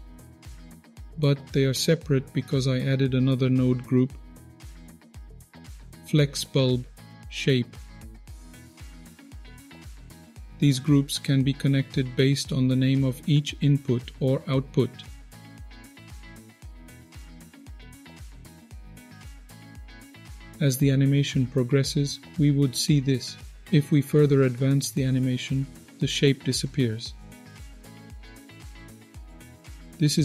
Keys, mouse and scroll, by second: 0.1 click, 1.1 shift+a, 8.8 click, 9.1 click, 10.1 middle click, 16.2-16.9 drag, 17.2-18.1 drag, 18.7-19.0 drag, 19.2-19.5 drag, 24.7-29.1 drag.